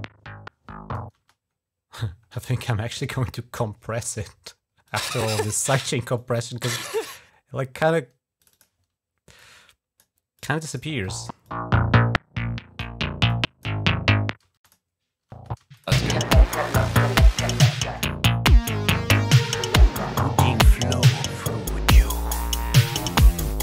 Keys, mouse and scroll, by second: 1.0 space, 1.8 scroll down 1, 2.2 right click, 4.7 click, 5.3 scroll down 2, 6.0 click, 7.7 scroll down 2, 8.3 click, 9.2 click, 10.2 click, 10.8 space, 11.3-12.7 drag, 13.1 click, 13.7 click, 14.3-16.2 typing, 14.4 click, 15.5 click, 18.4 click.